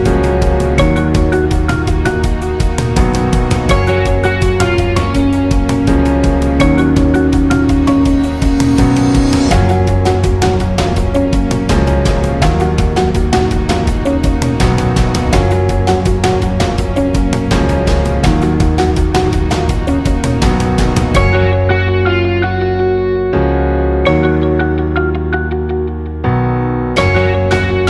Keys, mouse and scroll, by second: 4.4-6.0 drag, 6.7-14.6 alt+drag, 14.9 scroll down 1, 15.0 space, 15.2 click, 15.5 space, 16.4 alt+scroll up 1, 16.7 space, 16.8 click, 17.2 space, 18.0 alt+scroll up 1, 18.2 space, 18.4 click, 18.7 space, 19.3 click, 20.8-24.5 alt+shift+drag, 24.9 scroll down 1, 25.0 space, 25.2 click, 25.5 space, 26.9 alt+scroll up 1, 27.2 space, 27.4 click, 27.7 space.